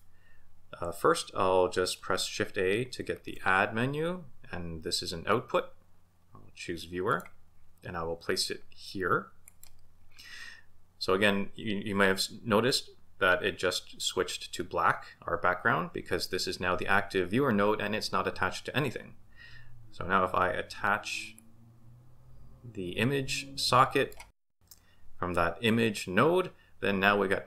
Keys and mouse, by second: 3.1 shift+a, 21.3 click, 21.5-24.1 drag.